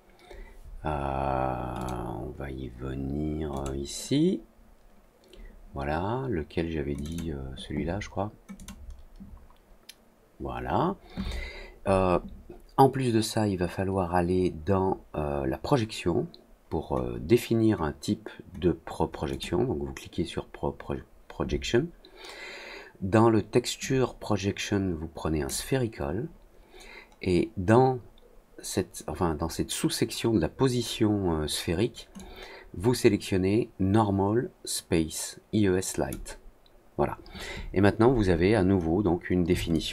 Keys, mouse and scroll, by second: 1.7 click, 3.5 click, 6.9 click, 8.5 click, 19.2 click, 23.7-25.4 drag, 26.6 middle click, 32.1-36.0 drag, 39.7 alt+click.